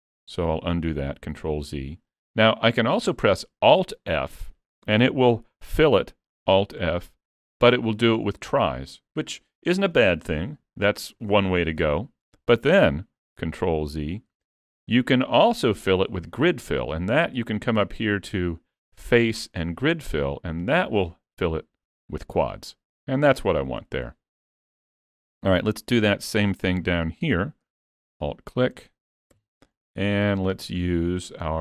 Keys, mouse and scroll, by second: 1.2 ctrl+z, 2.1 shift+middle click, 4.1 middle click, 6.8 alt+f, 8.6 middle click, 10.5-11.2 scroll up 1, 11.4 shift+middle click, 13.9 ctrl+z, 14.8 middle click, 18.0 click, 21.6 middle click, 23.6-24.1 scroll down 3, 24.1 shift+middle click, 25.7 middle click, 26.7-27.1 scroll up 2, 28.2 alt+click, 29.4 KP_Decimal, 30.0 middle click.